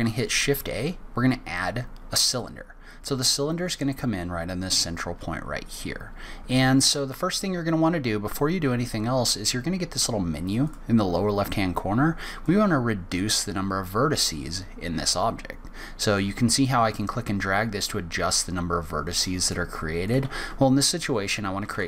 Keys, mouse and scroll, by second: 10.6 click, 12.4 click, 20.1 click.